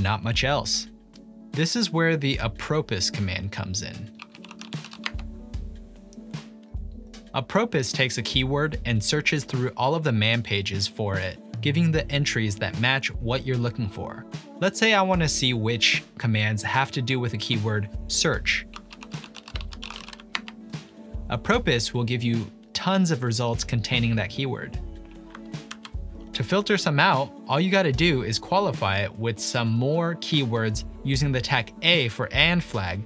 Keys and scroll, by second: 4.0-5.6 typing, 13.1 typing, 18.5-20.6 typing, 25.7 ctrl+l.